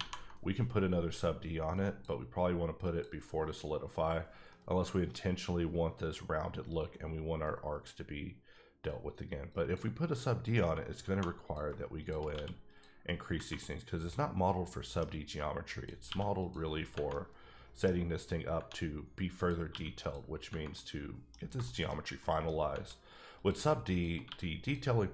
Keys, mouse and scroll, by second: 1.8 click, 2.8 click, 4.5 middle click, 9.5 click, 10.5 Tab, 11.0 2, 11.4 click, 12.3 q, 12.6 click, 13.3 scroll down 1, 13.6-15.1 middle drag, 15.1 scroll up 1, 15.2 Tab, 15.7 click, 16.0 q, 16.4 click, 16.7 scroll down 3, 17.1 middle click, 17.9 scroll up 1, 19.4 click, 19.7 q, 20.0 click, 20.7 middle click, 21.4 scroll down 2, 21.6 shift+middle click, 22.1-22.6 scroll up 2, 22.2 middle click, 22.8 Tab, 23.4 click, 24.2 q, 24.6 click.